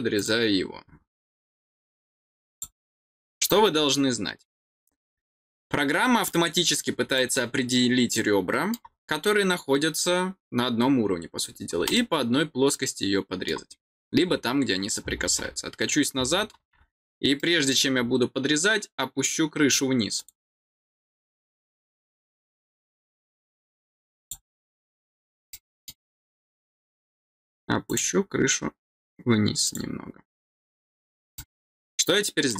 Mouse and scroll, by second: 0.1 click, 2.5 click, 3.5-3.8 scroll down 2, 4.8-5.3 scroll down 4, 6.2 scroll down 2, 7.1-8.7 middle drag, 11.4 scroll down 2, 11.9-13.4 middle drag, 14.0-14.5 scroll down 2, 14.8 scroll down 1, 17.3 middle click, 17.7 scroll down 1, 20.1 click, 24.2 click, 25.5 middle click, 27.8 click, 29.6 click, 31.3-32.5 middle drag.